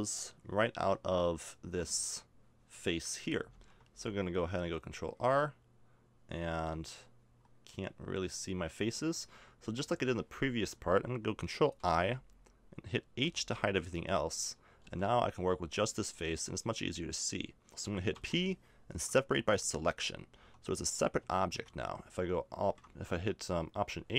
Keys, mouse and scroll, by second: 3.5 ctrl+r, 11.8 ctrl+i, 13.2 h, 14.8 ctrl+r, 18.1 p, 20.3 Tab, 21.2 Tab, 21.5 Tab, 22.9 Tab, 23.1 Tab.